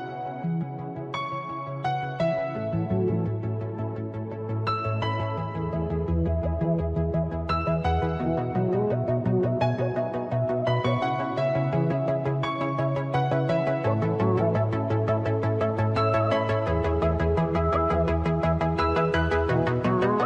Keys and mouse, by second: 0.3 click, 3.2 click, 3.9 click, 5.8 click, 8.4 click, 11.2 click, 12.0 click, 17.1 click.